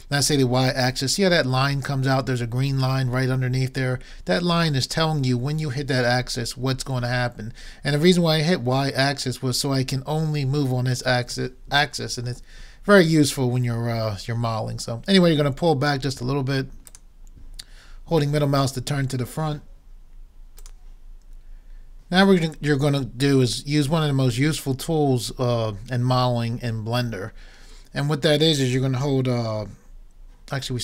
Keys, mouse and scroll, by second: 18.5 middle click, 18.9-20.7 middle drag, 24.7-27.5 middle drag.